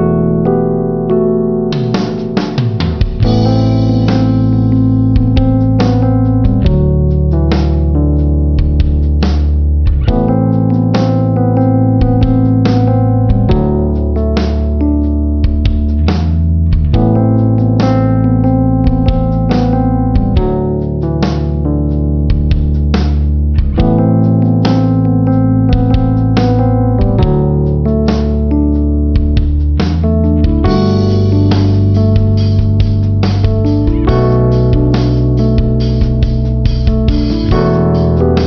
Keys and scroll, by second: 8.5 ctrl+-, 13.9 ctrl+-, 14.9 ctrl+=, 29.5 ctrl+-, 30.9 space, 31.8 ctrl+=, 33.1 space, 34.5 ctrl+alt+shift+n.